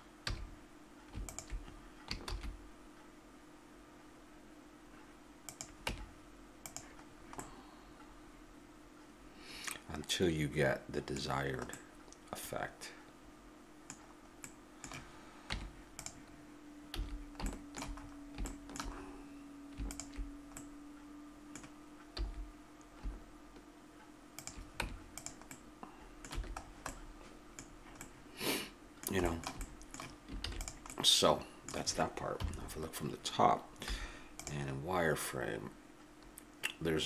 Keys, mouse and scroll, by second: 0.3 a, 2.3 shift+e, 5.9 Tab, 6.8 Tab, 7.1 middle click, 8.4-9.4 middle drag, 11.7-15.5 middle drag, 15.5 Tab, 16.9 a, 19.9 click, 20.2-21.6 middle drag, 22.2 s, 24.8 Tab, 26.3 a, 30.4 ctrl+s, 32.4 KP_7, 33.9 z, 34.8-37.0 middle drag.